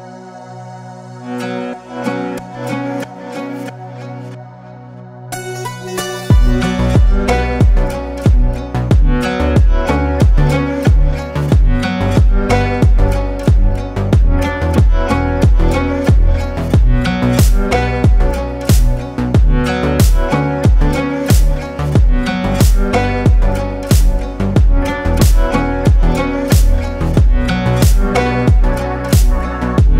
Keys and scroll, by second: 2.0 space, 8.1 space, 9.1 ctrl+space, 9.7 ctrl+space, 14.1 space, 15.1 ctrl+space, 15.9 ctrl+space.